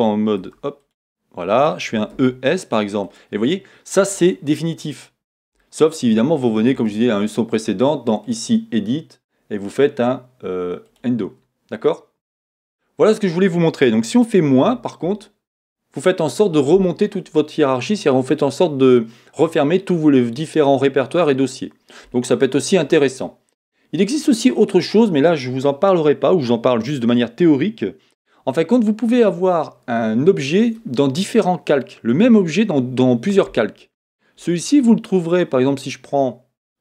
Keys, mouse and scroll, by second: 13.1 click.